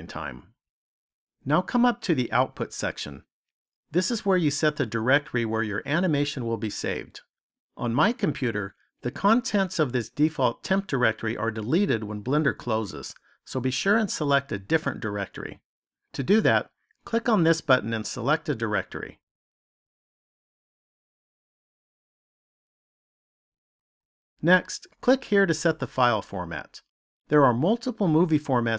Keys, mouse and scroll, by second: 25.7 click.